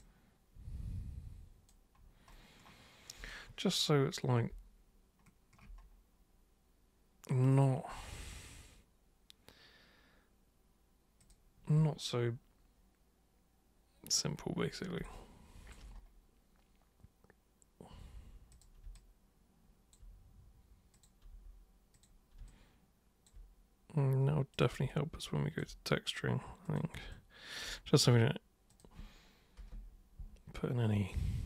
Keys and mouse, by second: 0.0-1.6 alt+super+drag, 7.5 super+click, 11.2 super+click, 15.0 alt+super+click, 18.5 super+click, 18.9 alt+super+click, 20.9 super+click, 21.9 super+click, 22.4 alt+super+click, 24.5 super+click, 24.9 alt+super+click, 26.6 super+click, 27.1 alt+super+click, 28.7 super+click, 29.6 super+Return.